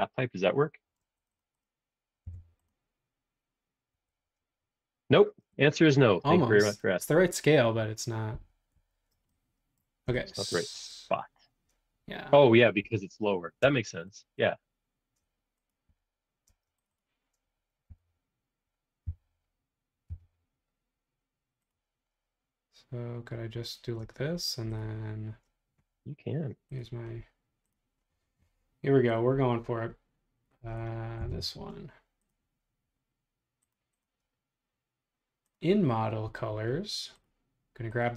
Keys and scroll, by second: 2.2 b, 3.9 ⟲, 5.2 space, 5.8 space, 8.3 super+z, 8.8 super+z, 12.9 r, 13.6 space, 15.9 r, 16.5 space, 17.9 r, 19.0 Left, 20.1 Right, 24.0 space, 31.2 b.